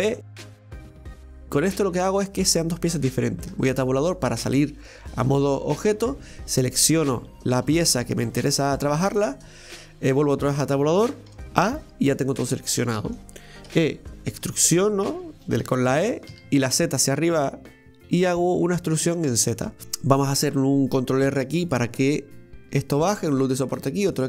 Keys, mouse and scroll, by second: 5.8 right click, 6.3 right click, 6.8 right click, 7.3 right click, 8.8-9.1 middle drag, 9.1 Tab, 12.9 middle click, 13.7 e, 19.3 middle click, 20.1-21.3 scroll up 1, 21.3 ctrl+r.